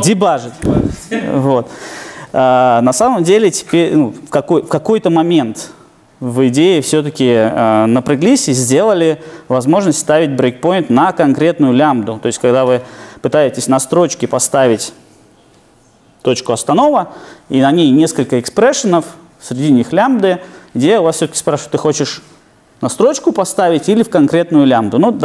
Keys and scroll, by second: 11.2 super+F8.